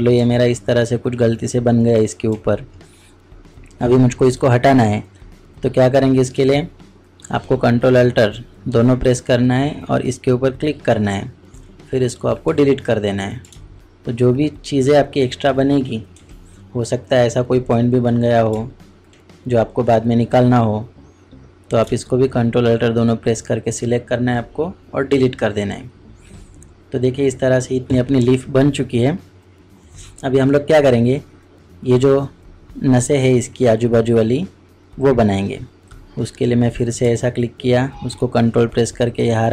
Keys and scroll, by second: 16.1 ctrl+alt+Delete.